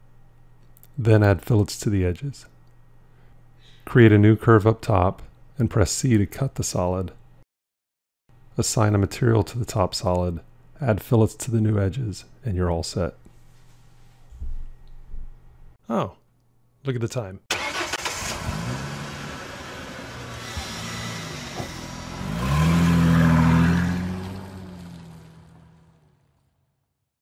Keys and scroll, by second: 6.3 c.